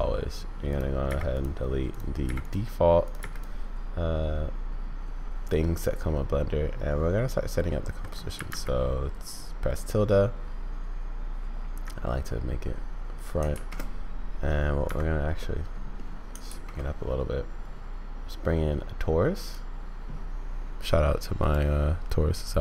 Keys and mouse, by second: 1.0 x, 2.2 x, 3.1 click, 3.2 x, 5.6 click, 5.7-7.7 middle drag, 13.5 shift+a, 15.4 middle click, 16.4 shift+a.